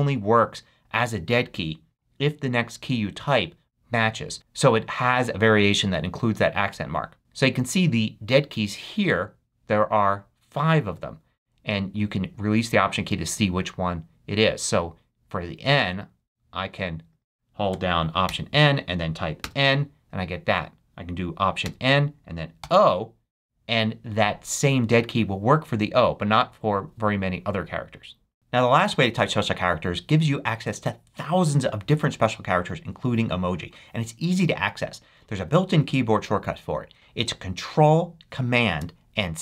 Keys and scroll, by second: 18.2 alt+n, 19.4 alt+n, 21.6 alt+n, 22.6 alt+o.